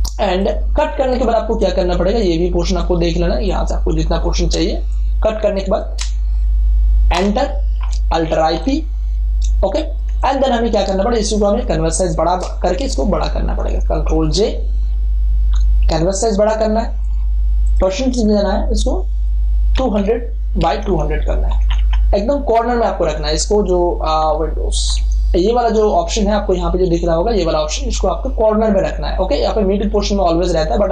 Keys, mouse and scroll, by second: 4.6 ctrl+space, 4.9 ctrl+click, 5.5 ctrl+click, 7.1 Return, 8.3 alt+i, 8.5 alt+p, 9.5 space, 9.7 ctrl+click, 10.7 ctrl+click, 14.4 ctrl+j, 15.7 ctrl+alt+c, 16.9 click, 17.0 click, 19.7 2, 20.6 Tab, 24.8 super+=.